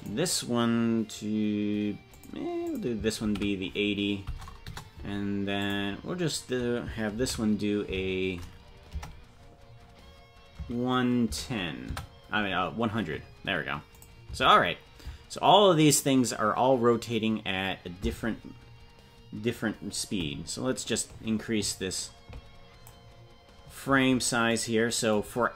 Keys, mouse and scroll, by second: 24.6-25.1 scroll down 10, 25.4-25.5 scroll down 1.